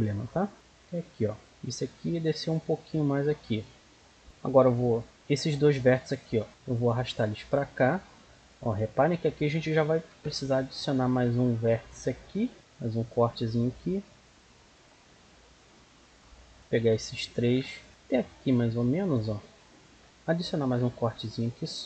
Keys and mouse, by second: 0.5 click, 1.3-3.0 right drag, 1.9-3.7 drag, 3.7 middle click, 6.4 right click, 6.7-8.3 drag, 10.0 ctrl+r, 12.8-15.5 right drag, 14.3-15.9 drag, 16.0 middle click, 17.1 right click, 20.5 ctrl+r.